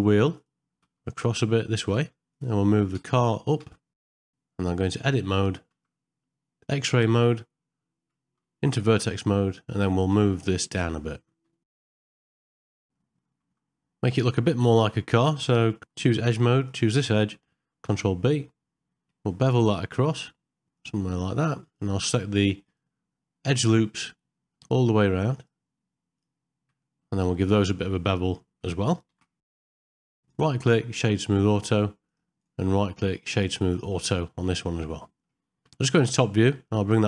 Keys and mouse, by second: 0.7 g, 2.3 click, 4.8 Tab, 5.7 z, 9.1-10.2 drag, 13.0 middle click, 17.9 ctrl+b, 21.7 alt+2, 22.7 click, 24.1 middle click, 26.9 middle click, 27.8 middle click, 29.2 ctrl+b, 30.1 Tab, 30.3 right click, 31.5 middle click, 32.0 click, 32.4-33.8 right drag, 34.6 middle click, 36.1 KP_7.